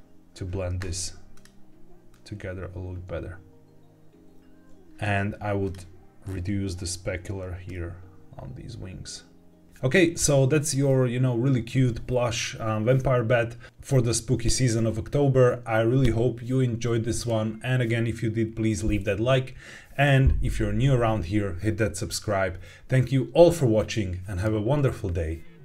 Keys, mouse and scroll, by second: 1.2 click, 4.8 click, 4.8-5.2 scroll up 2, 5.5 click, 6.2-6.9 scroll down 1, 7.6-9.6 drag.